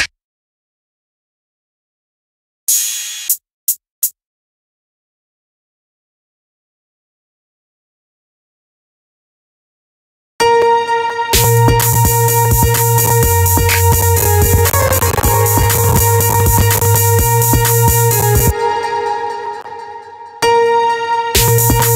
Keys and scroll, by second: 9.8 space, 18.1 space, 19.9 space.